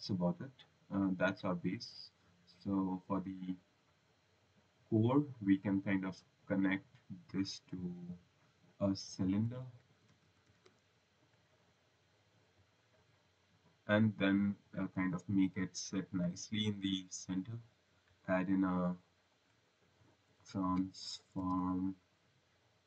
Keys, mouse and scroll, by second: 0.4 click, 0.9 right click, 3.1 click, 4.2 click, 5.3 click, 6.4 click, 9.2-11.0 typing, 12.1 click, 13.8 click, 14.5 click, 19.2 click, 20.1-22.0 typing.